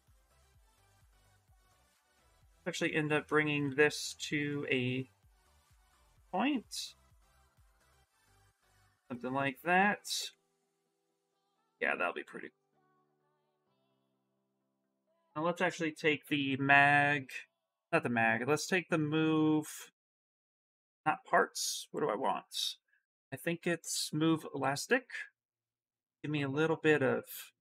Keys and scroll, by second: 0.1 w, 3.1 ctrl+shift+f, 3.8 shift+f, 7.9 q, 12.3 s, 14.5 ctrl+z, 15.3 b, 16.0 m, 24.3 s.